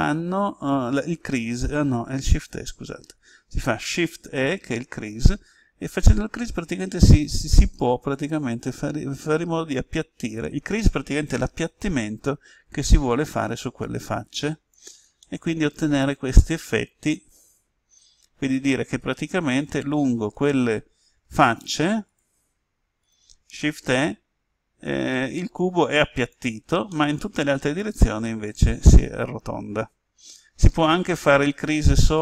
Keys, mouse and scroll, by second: 2.7 Escape, 4.3 shift+e, 14.6 click, 15.1-19.6 middle drag, 20.2 right click, 21.4 shift+right click, 23.8 shift+e, 26.2 click, 26.8-31.6 middle drag.